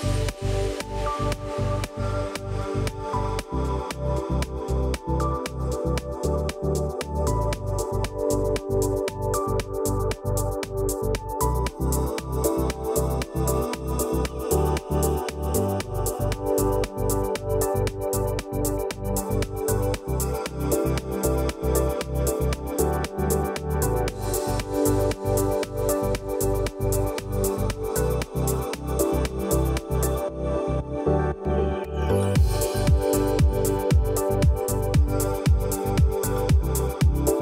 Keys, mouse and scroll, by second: 1.3 typing, 2.9 0, 4.4-8.8 typing, 10.0 click, 10.3-10.7 alt+scroll down 1, 10.9 alt+scroll up 1, 11.5 click, 13.7-15.0 typing, 16.0-20.7 typing, 21.5 click, 22.1-22.5 alt+scroll down 1, 24.7-27.1 drag, 28.6-29.2 shift+drag, 36.9 click.